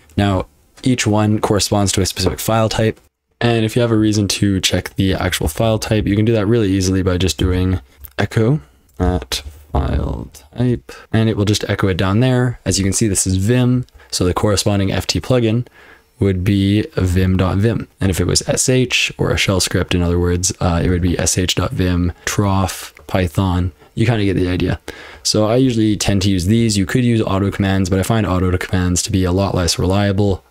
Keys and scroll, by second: 3.0 super+l, 3.0 F12, 3.0 typing, 5.1-6.0 typing, 7.2 Escape, 7.4-10.9 typing, 11.0 Return, 26.6 BackSpace.